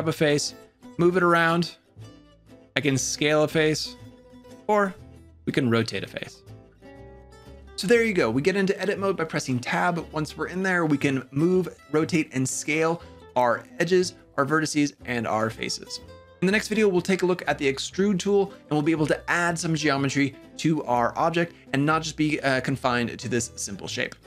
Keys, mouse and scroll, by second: 0.2 g, 2.6 s, 4.7 r.